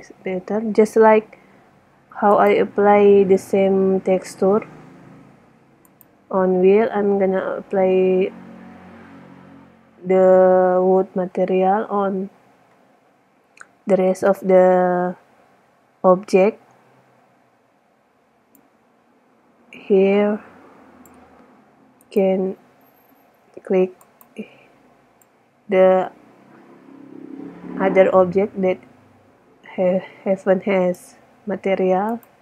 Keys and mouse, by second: 0.0 Escape, 2.6-3.0 right drag, 3.0 right click, 6.0-6.7 right drag, 18.8-20.2 middle drag, 20.3 middle click, 22.3-22.7 right drag, 24.0 middle click, 25.2 middle click, 26.3 middle click, 26.4-27.1 middle drag, 27.3 middle click, 27.5 middle click, 31.3-32.3 middle drag.